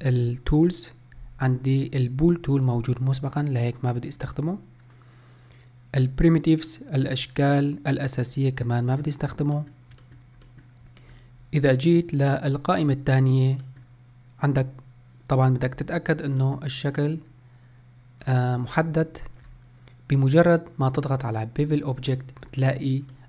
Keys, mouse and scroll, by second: 4.5 click, 7.8-9.2 middle drag, 9.2-9.9 drag, 9.9-18.5 middle drag, 18.5-18.9 scroll down 2, 18.9-21.3 scroll up 2, 21.7 click, 22.6-23.0 scroll up 2, 23.0 scroll down 1.